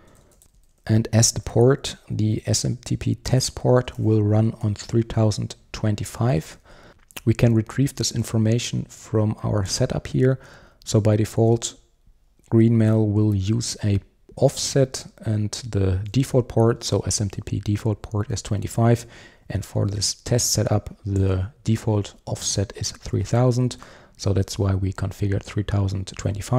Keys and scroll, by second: 0.4 super+z, 6.5 super+1, 9.8 super+b, 10.2 super+b.